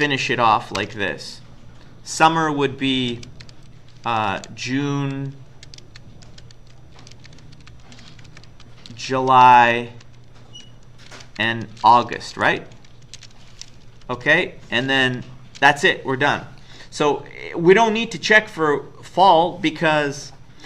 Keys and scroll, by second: 0.0-0.8 typing, 3.2-9.9 typing, 11.0-13.2 typing, 14.1 Down, 14.3 Down.